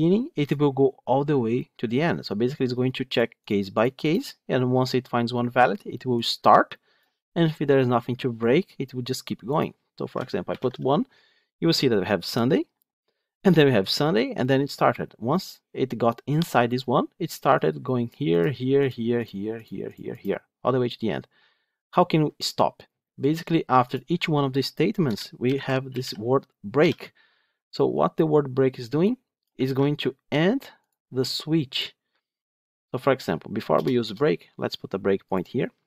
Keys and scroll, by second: 10.4 ctrl+shift+F10, 29.5 ctrl+c, 35.2 ctrl+F8.